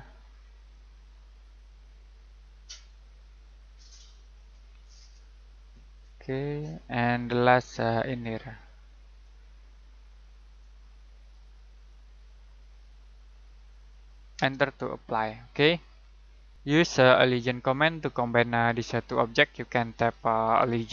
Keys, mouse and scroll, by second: 0.5 click, 7.3 middle click, 9.1 click, 14.3 space, 14.9-15.5 scroll down 1, 15.5 scroll up 1, 16.0 middle click, 19.9-20.9 typing.